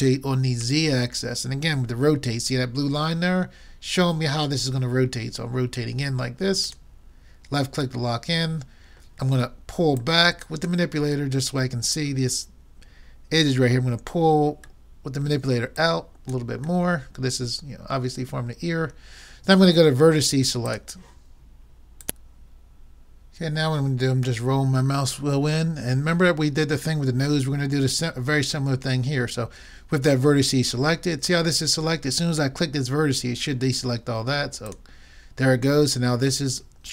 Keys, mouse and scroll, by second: 8.1-9.9 middle drag, 10.4-11.9 drag, 11.6-13.0 middle drag, 15.3 middle click, 15.7-17.5 drag, 17.5 click, 17.7 middle click, 20.7-22.1 drag, 23.0 middle click, 24.0-26.6 middle drag, 34.7-36.4 drag.